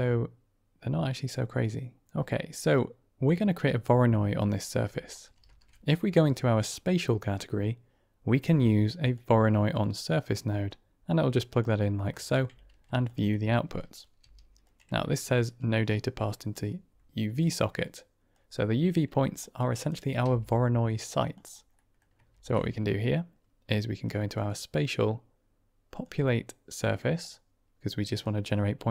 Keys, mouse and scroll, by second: 4.4 middle click, 5.3 shift+a, 10.6-11.6 drag, 12.0 middle click, 13.7 drag, 14.1 g, 15.9 click, 18.2-19.3 drag, 19.6 click, 20.1 g, 21.7 click, 22.2 shift+a, 27.1 click, 28.1-28.9 drag.